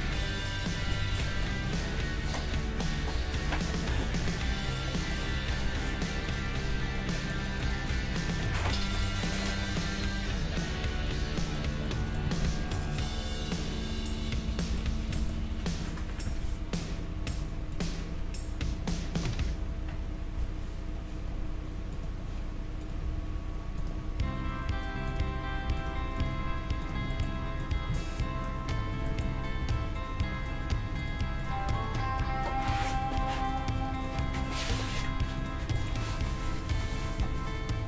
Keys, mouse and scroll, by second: 0.0 Tab, 0.8 Tab, 1.0 right click, 1.1 Tab, 2.9 g, 3.9 click, 5.3 g, 7.1-8.7 middle drag, 7.8 g, 8.9-10.6 right drag, 9.8 g, 12.3 Tab, 14.4 KP_3, 15.8 right click, 16.3 Tab, 17.1-21.0 right drag, 19.9 g, 22.2 middle click, 22.8-24.6 right drag, 23.0 g, 24.0 g, 25.8-27.1 right drag, 26.5 g, 27.1-28.9 middle drag, 28.0 click, 28.0 right click, 29.6 g, 31.4-33.8 right drag, 32.3 g, 33.8-35.8 right drag, 34.3 g, 35.8 middle click, 36.1-37.8 right drag, 36.7 g.